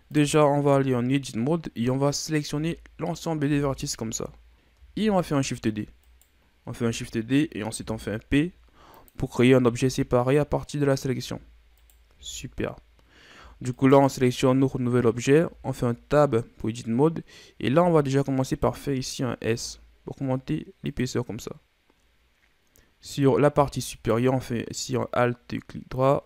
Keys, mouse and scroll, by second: 0.1 right click, 0.7 Tab, 2.4 z, 3.4 b, 5.0 shift+d, 7.8 p, 9.6 z, 10.0 scroll down 1, 10.2 middle click, 11.1 Tab, 11.7 right click, 12.1 Tab, 13.3 Tab, 13.7 right click, 15.3 Tab, 18.4 alt+right click, 19.4 s, 23.9 alt+right click, 25.9-26.2 drag.